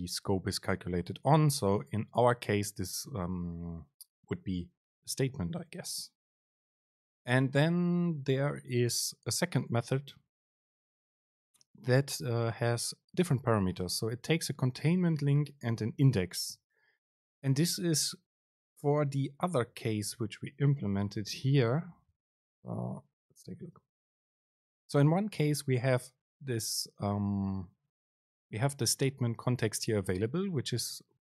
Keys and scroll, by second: 22.3 super+z.